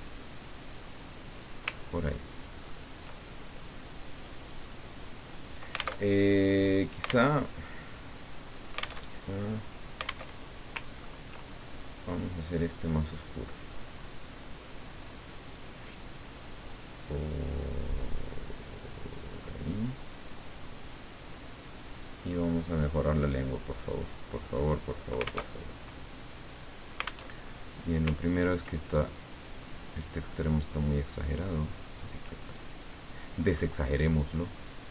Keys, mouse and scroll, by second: 1.9-2.3 ctrl+scroll down 2, 2.6-3.0 ctrl+scroll down 2, 4.1 click, 6.1 alt+Tab, 7.3 alt+Tab, 9.1 alt+Tab, 10.3 alt+Tab, 10.9-11.3 ctrl+scroll up 2, 12.1 click, 13.7 click, 15.5-20.1 drag, 21.7 click, 23.2 click, 25.4 alt+Tab, 27.3 alt+Tab, 28.2-28.6 ctrl+scroll up 2, 29.4 click, 30.4-32.2 drag, 32.3-33.7 middle drag.